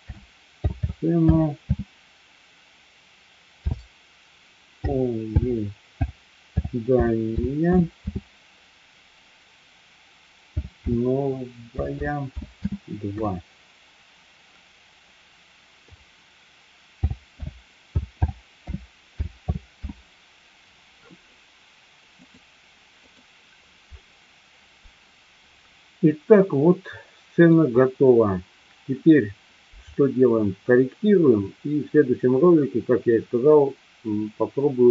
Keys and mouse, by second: 26.4-27.6 middle drag.